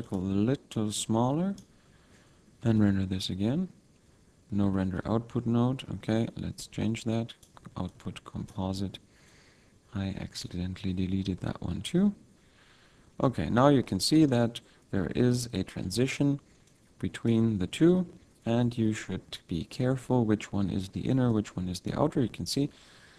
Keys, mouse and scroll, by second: 0.2 click, 0.7 click, 2.6 F12, 4.8 shift+a, 7.9 click, 9.3 click, 11.4 F12, 13.2 middle click, 13.8 middle click, 16.7 click, 21.3 click.